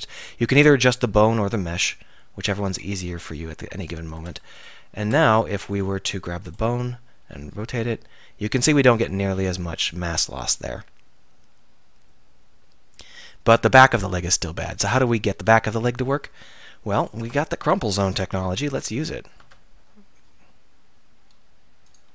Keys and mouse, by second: 4.2 Tab, 5.0 Tab, 5.6 Tab, 7.2 r, 14.7-15.7 drag, 15.7 z, 16.5 click, 17.0 click, 17.2 Tab, 18.5 k.